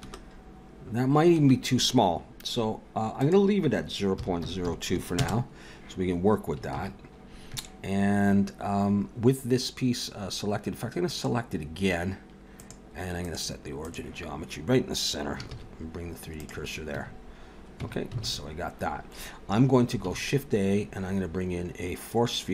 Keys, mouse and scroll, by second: 0.0 space, 1.3 space, 3.2 click, 6.8 ctrl+s, 11.1 click, 12.5 click, 15.5 shift+s, 16.9 Tab, 17.8 Tab, 18.2 alt+a, 20.0 shift+a.